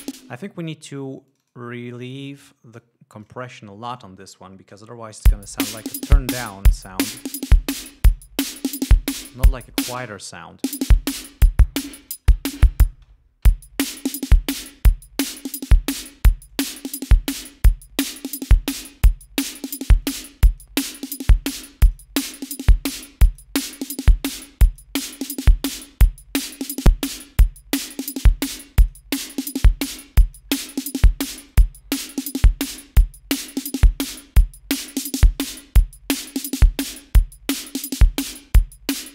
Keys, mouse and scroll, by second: 0.4 space, 1.6 click, 3.1-3.8 drag, 4.5 click, 5.5 l, 7.4-8.6 drag, 10.0 click, 10.8 space, 12.3 click, 13.2 space, 13.7 l, 14.3 click, 15.8 click, 16.8-18.5 drag, 19.7-20.1 drag, 20.3-21.1 drag, 21.8-22.4 drag, 23.2-23.9 drag, 24.7-25.3 drag, 26.5 click, 27.7-28.3 drag, 28.8-29.4 drag, 30.6-32.4 drag, 33.9-37.5 drag, 38.0 scroll down 1.